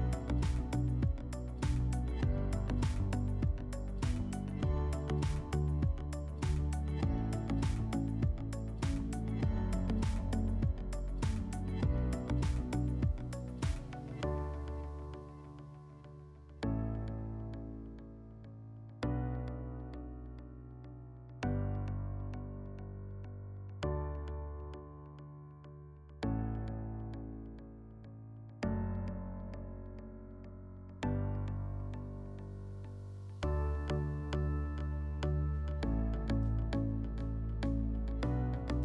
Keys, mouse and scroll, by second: 0.9 click, 2.8 alt+w, 3.6 middle click, 4.8 click, 5.7 click, 7.7 s, 9.4-10.9 drag, 12.9 shift+click, 13.6 click, 15.4 click, 16.3 alt+w, 17.2 alt+w, 21.2-22.8 drag, 25.8-26.7 drag, 28.5 click, 28.7 click, 29.4 typing, 30.2 Return, 31.8 middle click, 32.3 s, 36.0-37.6 drag.